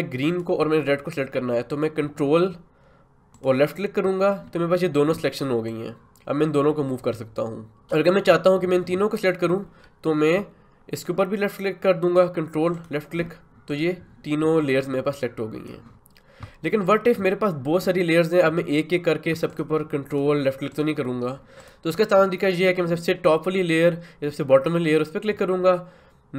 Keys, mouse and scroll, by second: 0.3 click, 5.7-10.4 drag, 12.7-16.8 ctrl+drag, 19.5 ctrl+click, 21.6 click.